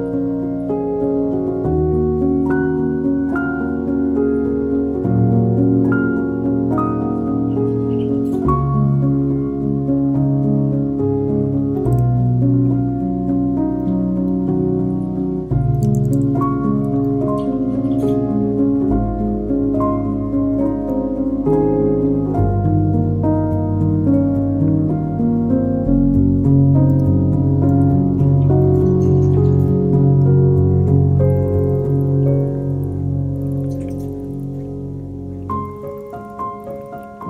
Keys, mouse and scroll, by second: 2.8 click, 4.5 click, 7.8 click, 9.9 click, 11.1-12.1 scroll up 1, 12.1 shift+d, 14.8 middle click, 15.6 r, 17.6-19.2 middle drag, 19.2 click, 19.7-20.6 scroll up 2, 20.6 click, 20.6 scroll up 1, 22.7 right click, 24.7 s, 26.7 scroll up 1, 26.7 middle click, 27.5 click, 27.9 shift+click, 28.5 s, 30.3-32.5 middle drag, 32.5 click, 33.6 click, 33.8 scroll down 2, 33.9-35.2 middle drag, 35.2-36.2 scroll up 3, 36.2-36.8 scroll up 1, 36.8 click, 37.0-37.2 scroll up 2.